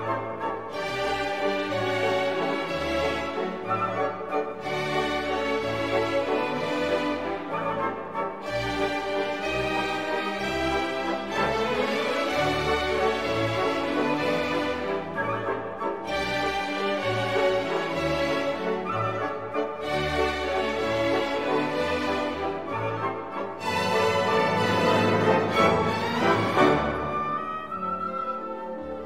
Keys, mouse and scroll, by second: 0.1 0, 1.5 click, 2.2-2.7 scroll down 1, 6.1 click, 7.8 click, 8.6 click, 9.3 1, 9.7 0, 10.4 click, 10.9-11.3 scroll up 1, 12.3 click, 13.9 click, 14.9 2, 15.3 0, 16.2-17.5 drag, 17.8-18.9 drag, 19.4 click, 20.9 scroll down 1, 23.8 click, 24.7 click, 25.9 click.